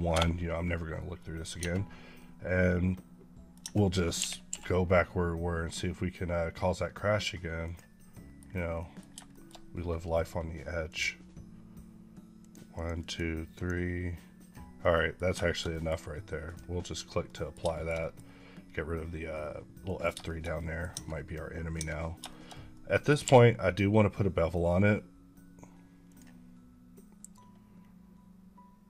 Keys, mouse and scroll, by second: 1.0 middle click, 1.4 Tab, 2.0 middle click, 3.5 Tab, 4.0 KP_1, 4.3 q, 7.7 click, 8.0 middle click, 8.3-9.0 scroll down 3, 8.6 middle click, 9.2 shift+middle click, 10.7 click, 12.2 click, 12.6 click, 13.4 click, 14.7 middle click, 15.3 shift+middle click, 17.1 middle click, 17.6 middle click, 18.1 scroll up 1, 18.7 scroll up 1, 19.2 middle click, 20.1 shift+middle click, 22.1 shift+middle click, 23.1 q, 25.9 click.